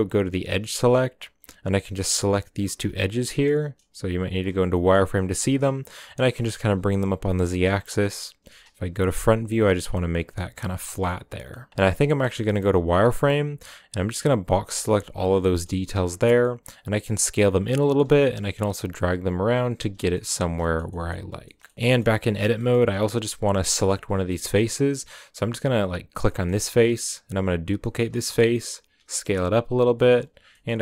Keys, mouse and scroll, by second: 0.1-0.4 drag, 0.4-1.2 middle drag, 1.2 right click, 2.0 right click, 2.7 z, 3.4 shift+right click, 4.5 z, 4.7 scroll up 1, 4.7-5.4 middle drag, 5.4 g, 7.1 KP_1, 7.8 shift+middle click, 8.0-8.3 scroll up 4, 8.3 g, 10.9 scroll down 2, 11.0-11.5 middle drag, 11.5 scroll down 5, 11.7 1, 12.2 z, 12.4-14.9 middle drag, 14.9 b, 15.4 middle click, 15.7 z, 16.2 s, 17.8 g, 19.9 scroll down 4, 20.1 middle click, 20.3 Tab, 20.6 shift+middle drag, 20.8-21.4 scroll down 3, 20.9 middle click, 21.4-22.1 shift+middle drag, 22.1-22.5 scroll up 1, 22.5 shift+middle click, 22.9-24.8 scroll up 1, 24.8-25.9 drag, 25.9 right click, 26.1 scroll down 1, 26.3-27.3 shift+middle drag, 27.3 shift+d, 28.6 s, 29.8 s, 30.4 g.